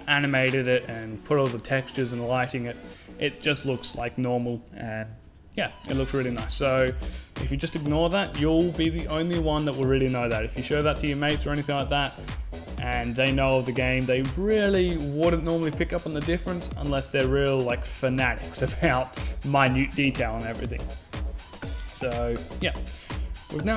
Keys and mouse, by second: 21.2 KP_5, 22.0 z, 22.4-23.7 middle drag.